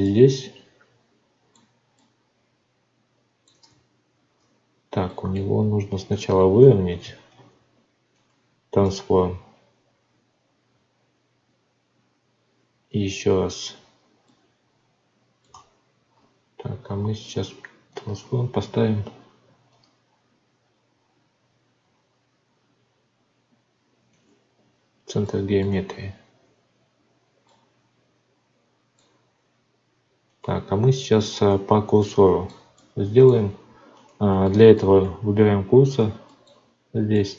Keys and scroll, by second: 3.6 Tab, 7.3 ctrl+a, 8.8 Tab, 15.5 Tab, 25.6 Tab, 35.0 z.